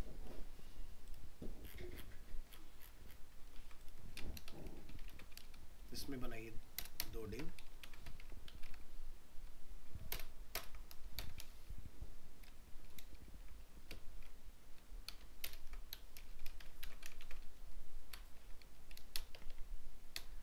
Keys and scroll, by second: 3.6 ctrl+s, 5.1 ctrl+c, 7.9 ctrl+v, 10.1 ctrl+BackSpace, 13.1 ctrl+Right, 15.5 ctrl+BackSpace, 16.8 ctrl+c, 17.1 ctrl+Return, 17.2 ctrl+v.